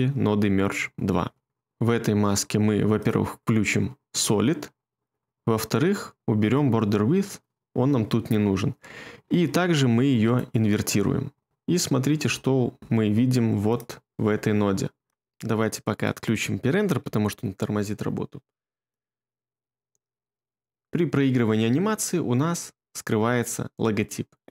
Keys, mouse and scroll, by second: 17.0 2.